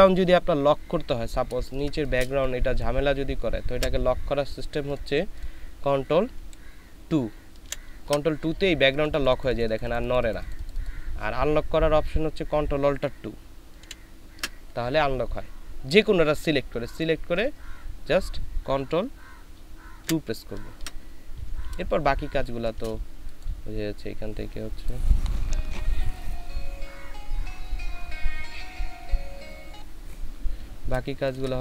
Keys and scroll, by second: 1.6 ctrl+space, 3.7 ctrl+z, 7.6 ctrl+KP_2, 13.8 ctrl+alt+KP_2, 20.0 ctrl+KP_2, 22.3 ctrl+space, 31.1 ctrl+space.